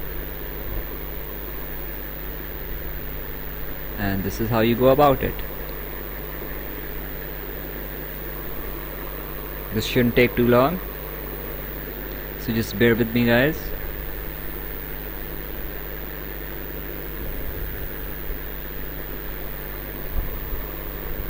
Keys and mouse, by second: 1.6 click, 2.9 click, 4.8 click, 6.2 click, 7.8 click, 11.1 click, 15.7 click, 17.1 right click, 18.5 right click, 20.5 click.